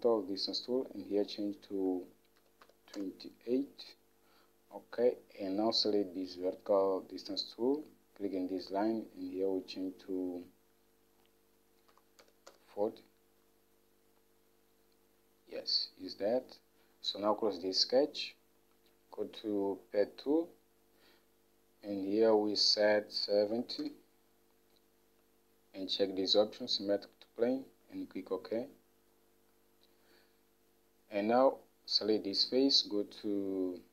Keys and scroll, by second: 2.3-3.3 typing, 12.1 4, 12.4 0, 12.7 Return, 14.6 typing, 16.2 typing, 23.7-24.5 typing.